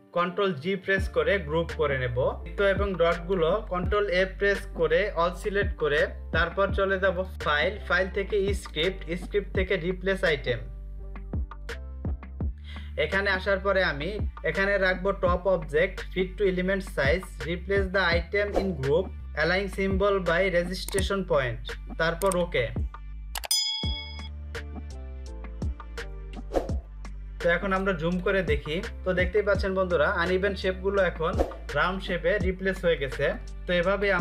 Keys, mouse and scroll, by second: 0.2 ctrl+g, 2.4 click, 3.6 ctrl+a, 6.6 click, 11.0 click, 21.7 click, 25.9 click, 26.8 space, 27.8 space, 27.9 ctrl+click, 28.2 space, 28.5 space.